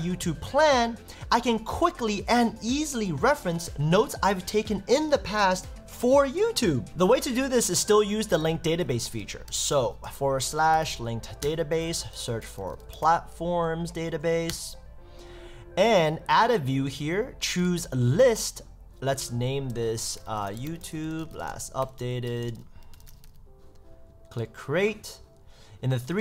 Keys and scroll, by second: 9.4 Return, 11.4 Return, 14.1 Down, 14.5 Return, 20.2 shift+y, 20.5 shift+t, 21.0 shift+l, 22.6 shift+u.